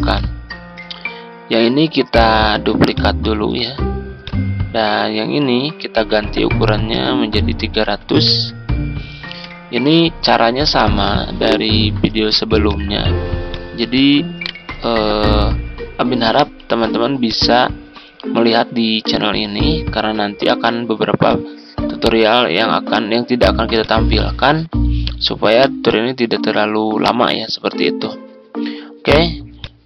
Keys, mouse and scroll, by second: 2.2 ctrl+d, 2.9 click, 7.8-8.3 typing, 9.4 Return, 11.0 shift+click, 11.7-12.0 typing, 13.9 shift+click, 14.3 right click, 16.2-20.3 drag, 20.5 z, 21.2-27.3 drag.